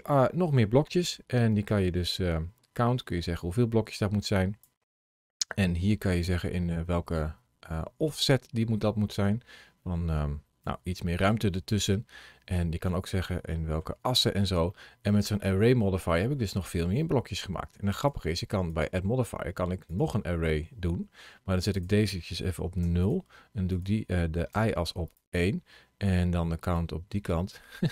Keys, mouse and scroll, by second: 0.0 middle click, 1.5 click, 5.1 scroll down 1, 6.2 click, 12.3-12.7 scroll down 1, 12.7 middle click, 14.0 scroll down 2, 14.5 middle click, 17.8 click, 18.5 click, 23.5 click, 26.6 click.